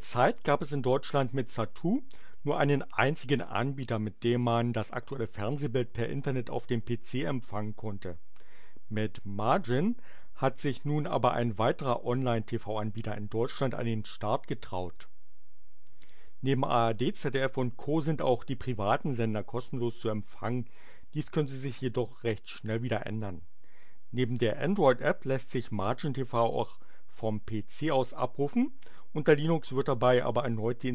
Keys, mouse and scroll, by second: 14.8 click.